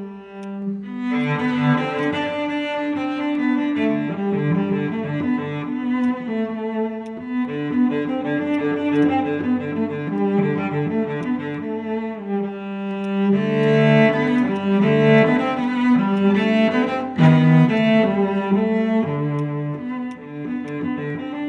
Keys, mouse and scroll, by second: 5.4-5.9 scroll up 1, 6.0 alt+click, 6.8 alt+middle click, 9.0 double click, 9.3-9.8 typing, 10.2 Return, 14.6 right click, 17.2 alt+click, 18.4 scroll down 1, 20.7 alt+click.